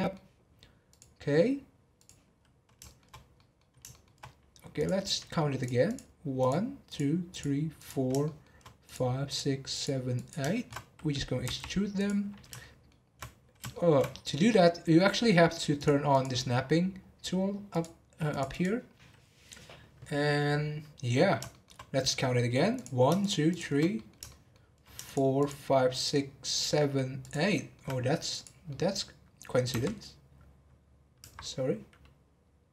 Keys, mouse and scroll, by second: 0.8-2.3 drag, 2.3-2.8 scroll up 1, 2.8-4.7 shift+middle drag, 4.7 click, 5.6 click, 5.8 click, 6.4 click, 6.9 click, 7.3 click, 7.7 click, 8.2 shift+middle click, 8.8 click, 9.2 click, 9.7 click, 10.1 click, 10.5 shift+middle click, 11.4 e, 12.6-14.1 shift+middle drag, 14.1 scroll up 1, 14.4-15.7 middle drag, 15.7 click, 16.1 click, 17.7 click, 18.3 click, 18.5 click, 21.4-22.7 shift+middle drag, 22.7 click, 23.2 shift+click, 23.5 shift+click, 23.9-25.0 middle drag, 25.0 shift+click, 25.4 shift+click, 26.0 shift+click, 26.5 shift+click, 27.2 shift+click, 27.5 shift+middle click, 28.3 click, 28.6-29.7 middle drag, 29.7 e.